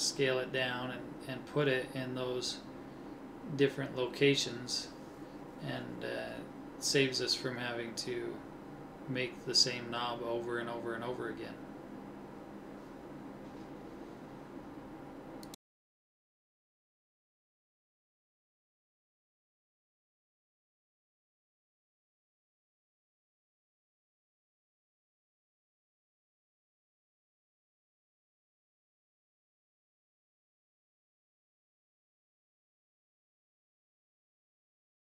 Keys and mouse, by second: 3.4 middle click, 8.4 middle click, 9.0 middle click, 9.2 middle click, 9.7 middle click, 12.4 alt+h, 17.5 KP_1, 18.3-20.9 middle drag, 23.9 shift+d, 28.7 ctrl+z, 29.6-31.9 middle drag, 33.9 a, 34.3 middle click, 34.4 middle click.